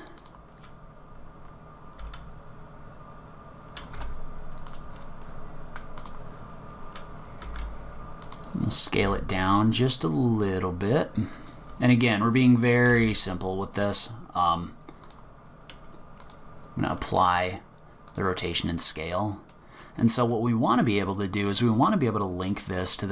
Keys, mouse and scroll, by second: 0.5-2.0 scroll up 7, 2.0 s, 4.7 click, 6.0 click, 7.4 s, 9.0 g, 12.8 r, 16.2 click, 18.7-19.5 scroll down 6, 19.5 middle click, 21.2-21.8 scroll up 4.